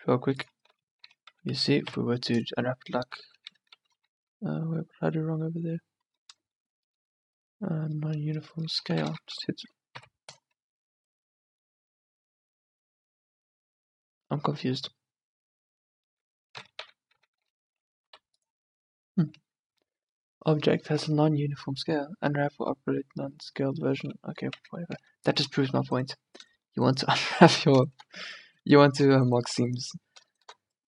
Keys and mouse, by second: 0.8 Tab, 1.2 Tab, 2.0 u, 3.6 Tab, 4.1 Tab, 9.0 a, 9.2 a, 10.1 u, 15.3 middle click, 16.2 Tab, 16.6 Tab, 16.9 a, 17.2 a, 18.2 u, 24.7 a, 25.1 Tab, 25.7 Tab.